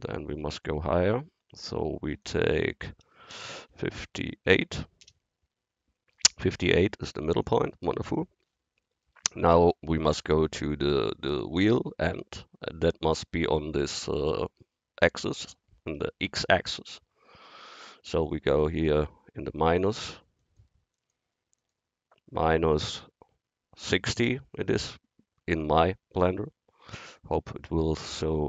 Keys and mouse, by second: 3.5 BackSpace, 8.6-10.9 middle drag, 17.5-18.8 drag, 20.1-21.7 middle drag, 23.3 click.